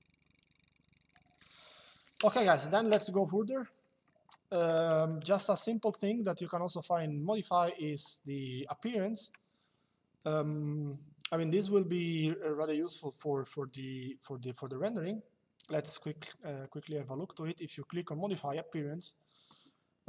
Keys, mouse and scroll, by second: 3.5 middle click, 5.0 middle click, 14.6 click, 19.9 click.